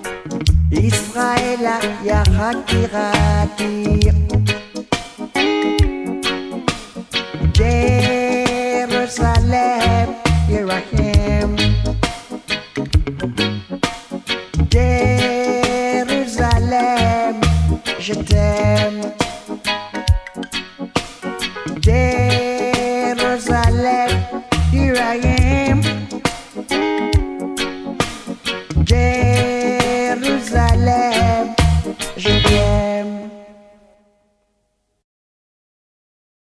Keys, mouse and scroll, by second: 6.3 right click, 7.5-20.6 drag, 22.9-24.4 scroll down 1, 24.4 click, 24.8-25.3 scroll down 1, 29.0 click.